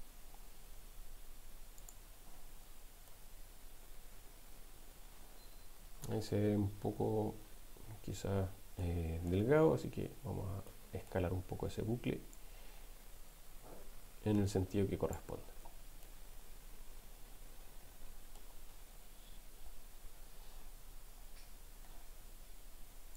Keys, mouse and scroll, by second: 1.8 click, 2.7 Tab, 3.1-6.1 middle drag, 7.4 Tab, 9.1 middle click, 10.7 middle click, 12.3-15.3 drag, 15.5 Tab, 16.3-18.5 middle drag.